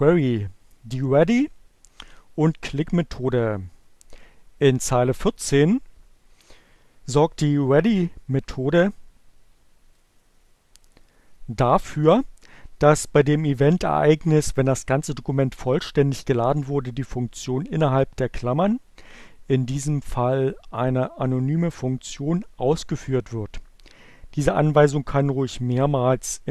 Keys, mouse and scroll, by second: 10.1-11.3 drag, 18.6-20.2 drag.